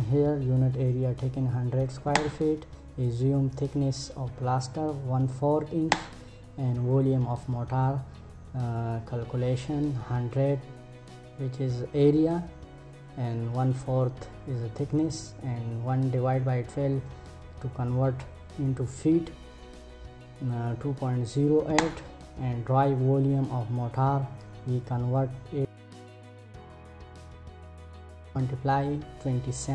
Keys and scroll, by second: 1.6 Return, 5.4 Return, 21.2 Return.